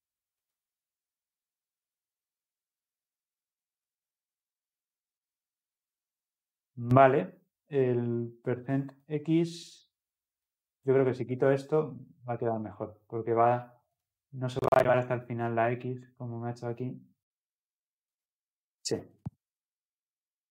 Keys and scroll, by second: 14.0 ctrl+F10.